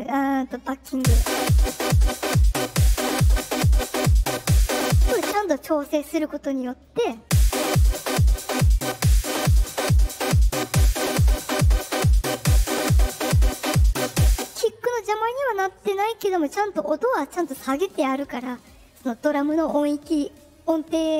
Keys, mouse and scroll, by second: 0.8 space, 2.1-3.3 drag, 5.1 space, 6.0 click, 6.8-8.4 drag, 7.1 space, 10.1-12.1 drag, 14.2 space.